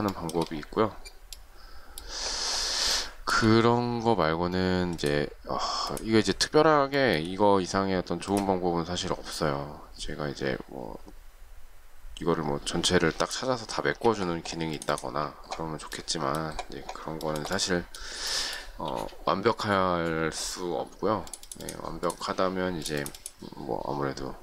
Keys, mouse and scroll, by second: 0.1 shift+middle click, 2.9 shift+middle click, 6.9 shift+middle click, 13.8 space, 17.2 shift+middle click, 18.3 shift+middle click.